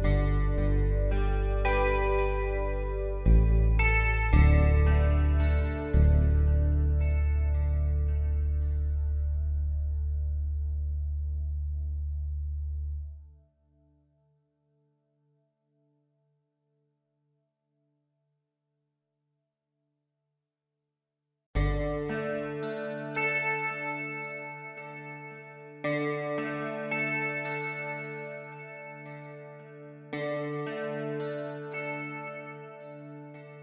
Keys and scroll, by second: 2.0 space, 3.6 ctrl+z, 3.7 e.